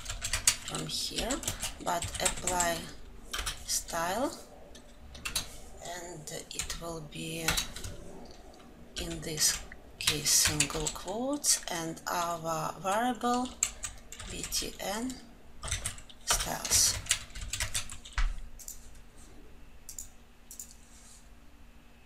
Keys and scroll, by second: 0.7 ctrl+alt+l, 5.6 Return, 16.8 Return, 18.0 ctrl+alt+l.